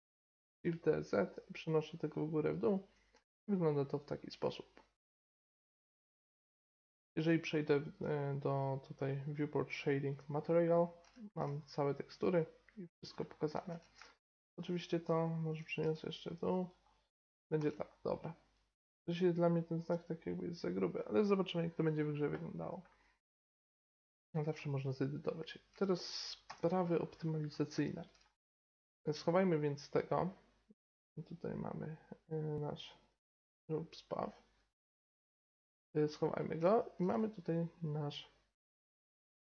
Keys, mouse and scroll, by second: 2.0-3.1 middle drag, 3.1 Tab, 6.5-7.5 middle drag, 10.7-13.2 middle drag, 13.6 Tab, 15.4 g, 17.5 Tab, 22.3-28.2 middle drag, 26.4 n, 28.9-32.7 right drag, 32.7-35.2 drag, 34.7 middle click, 35.2 click, 35.7-36.4 drag, 36.4-38.1 middle drag, 36.4-37.9 right drag, 38.6 click, 39.1-39.4 drag.